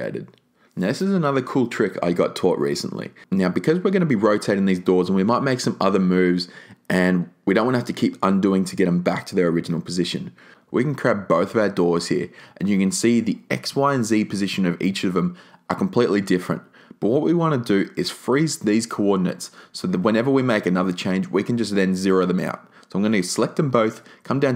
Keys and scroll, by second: 1.9 a, 4.9 super+z.